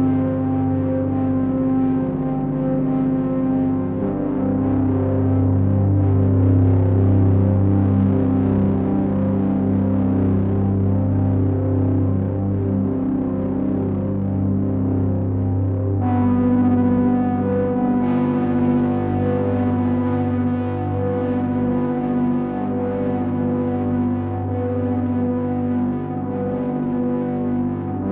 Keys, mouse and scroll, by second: 2.4 middle click, 9.1 middle click, 11.1 click, 12.0 middle click, 17.4 click, 18.1 click, 20.3 click, 25.8 click.